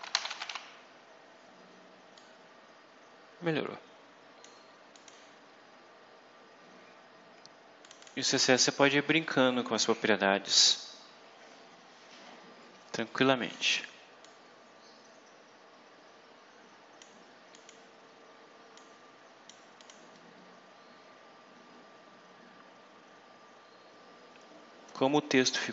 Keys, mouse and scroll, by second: 0.0-0.8 typing, 2.0-4.5 drag, 4.8 click, 7.7 click, 14.1-17.1 drag, 17.4 click, 18.7 click, 19.7 click, 20.3-20.7 scroll up 1, 21.0-22.1 scroll down 2, 22.4-23.0 scroll up 1.